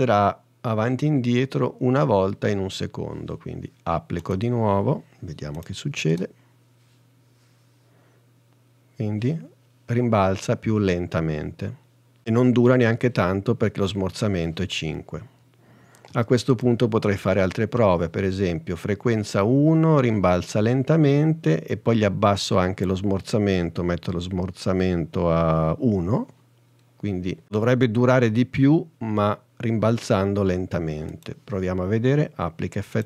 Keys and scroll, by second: 6.2 space, 16.2 space, 26.2 i.